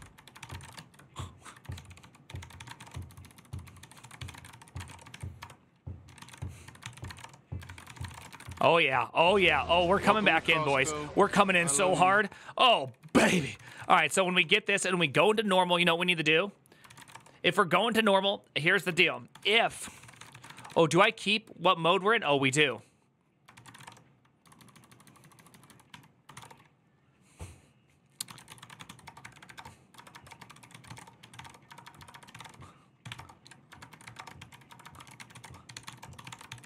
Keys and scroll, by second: 0.0-9.5 typing, 3.7 ctrl+c, 7.4 ctrl+^, 7.6 ctrl+c, 8.0 ctrl+z, 8.1 ctrl+^, 9.8 ctrl+d, 10.0 ctrl+d, 11.5-14.9 typing, 16.4-17.3 typing, 18.5-26.5 typing, 27.7-36.6 typing.